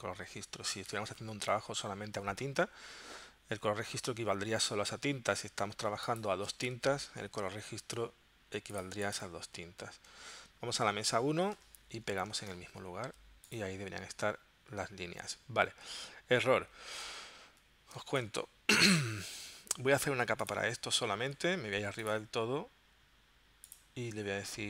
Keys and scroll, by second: 11.9 shift+super+v, 17.0 super+z, 18.0 space.